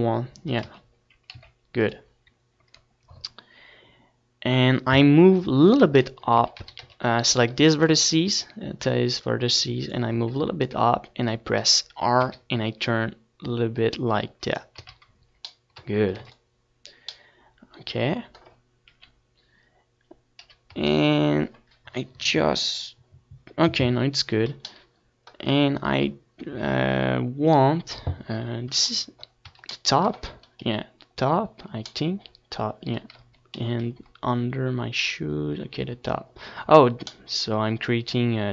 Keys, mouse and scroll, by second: 0.2 Tab, 0.5-2.7 middle drag, 0.7 z, 1.0 a, 1.1 c, 2.7 right click, 3.6 middle click, 4.4-5.4 drag, 5.1 r, 6.0-7.7 right drag, 6.5 r, 8.8-10.6 drag, 9.0 z, 9.8 Tab, 10.3 ctrl+s, 12.9 KP_3, 14.7 KP_1, 15.0 Tab, 19.1-20.8 middle drag, 20.8 KP_7, 23.7 KP_7, 24.5 Tab, 25.6 KP_7, 28.8 ctrl+KP_7, 30.7 KP_7, 32.0-34.7 middle drag, 37.8 KP_7.